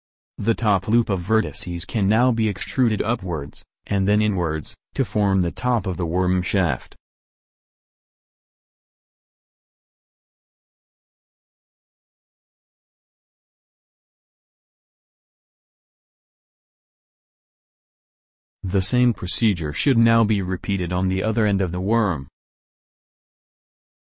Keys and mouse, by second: 0.9-3.6 middle drag, 5.0 e, 10.8 alt+m, 13.9 a, 22.3 middle click, 22.8 middle click, 23.5 middle click.